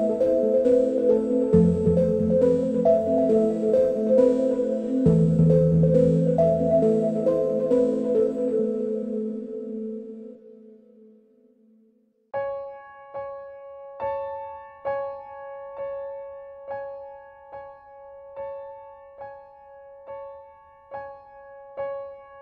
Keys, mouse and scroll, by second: 1.5 click, 2.4 click, 4.3 click, 7.6-9.2 drag, 10.7-14.9 drag, 19.4 click.